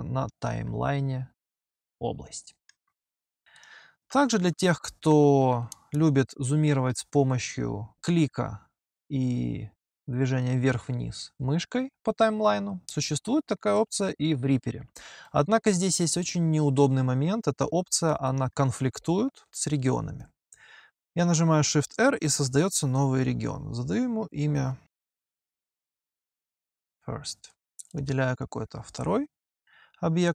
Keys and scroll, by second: 4.1 g, 4.9 h, 22.2 p, 22.7 shift+r, 25.3-26.7 typing.